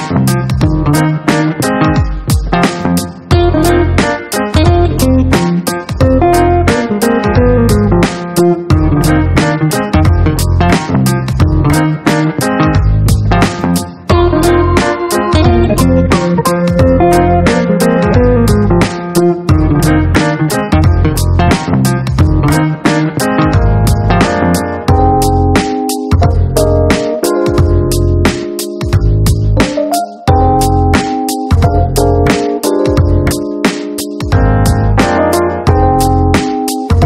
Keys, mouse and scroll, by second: 0.0-0.1 typing, 1.9 click, 4.9 click, 6.2 click, 8.6 click, 9.4 click, 10.0 right click, 11.3 click, 12.0 click, 12.8 click, 13.3 middle click, 14.1-14.9 drag, 16.2 click, 19.7 KP_2, 19.9 KP_0, 21.1 Tab, 22.5 ctrl+a, 23.4 KP_1, 23.6 KP_5, 23.8 KP_0, 24.0 Return, 26.1 click, 27.3 click, 27.9 ctrl+d, 29.5 click, 30.3 KP_5, 30.4 KP_0, 30.8 KP_Enter, 32.4 click, 33.1 click, 36.0 click.